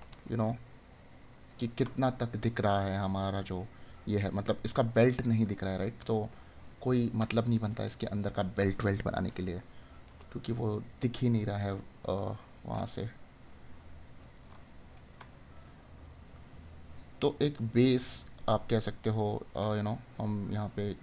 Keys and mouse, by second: 6.7 right click, 14.5 right click.